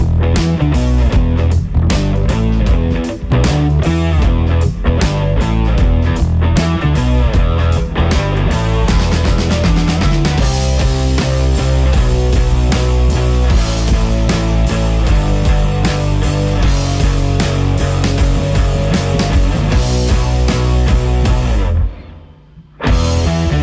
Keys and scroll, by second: 10.3 ctrl+x, 22.7 e.